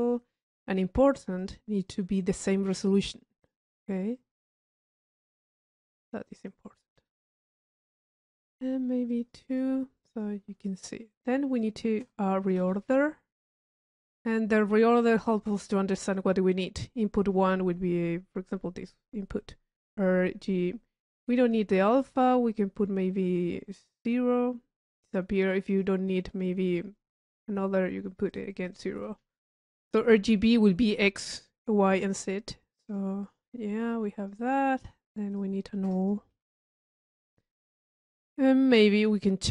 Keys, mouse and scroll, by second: 0.7 middle click, 1.4 click, 3.8 middle click, 4.2 click, 6.2 click, 7.3-8.3 drag, 8.4 click, 9.1 click, 10.0 click, 11.6-12.5 drag, 14.5 click, 21.5 click, 21.8 click, 24.0 click, 24.8 middle click, 25.7 click, 28.3 click, 32.4 middle click, 32.7 drag, 33.4 right click, 34.3 click, 35.4-36.1 drag, 36.5 u, 37.3 click, 38.3 middle click, 38.9 click.